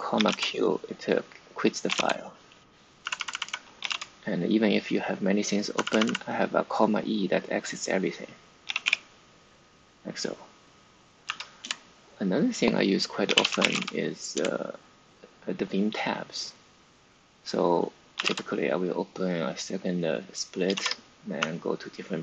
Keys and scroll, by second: 0.0-0.7 typing, 1.8-4.3 typing, 5.6-6.3 typing, 7.8-9.3 typing, 11.1 v, 11.5 Return, 12.9-14.1 typing, 14.3 Return, 17.8-18.6 typing, 20.6-22.2 typing.